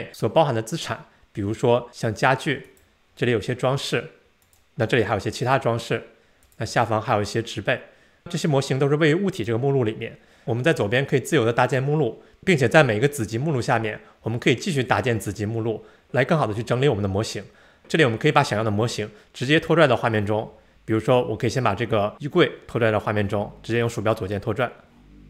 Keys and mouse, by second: 2.7 click, 4.4 click, 6.4 click, 9.4 click, 24.1-25.2 drag.